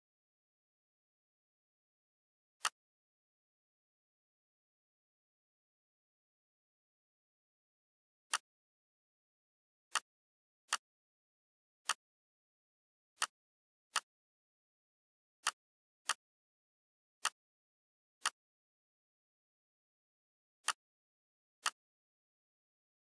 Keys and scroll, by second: 5.2 Delete.